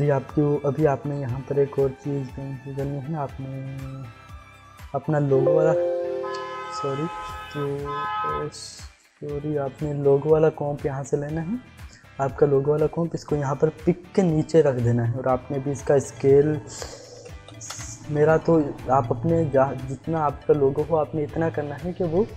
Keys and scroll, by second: 15.0 s, 16.9-17.8 typing.